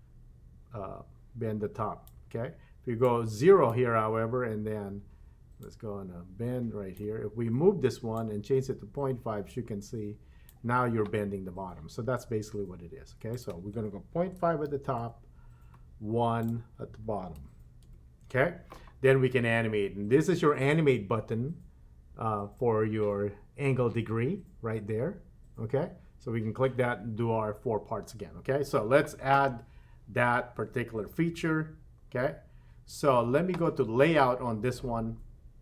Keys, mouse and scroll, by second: 3.0 click, 5.6-7.1 drag, 8.1-10.6 drag, 13.3-15.1 drag, 16.4-17.9 drag, 30.6-31.0 scroll up 4, 31.0-32.4 scroll down 7, 32.4-33.0 scroll up 2, 33.0 scroll up 1.